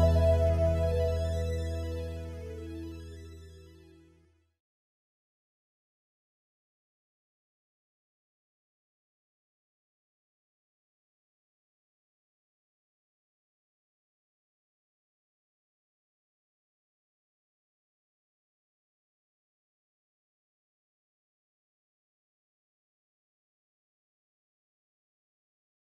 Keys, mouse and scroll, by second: 0.5 space.